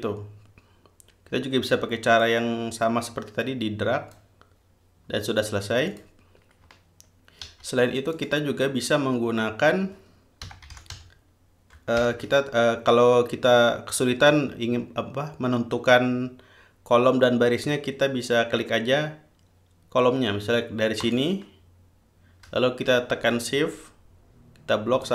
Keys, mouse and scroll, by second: 2.4-4.6 drag, 6.1 click, 7.7 ctrl+z, 8.4 ctrl+click, 10.4-12.2 typing, 21.2 click.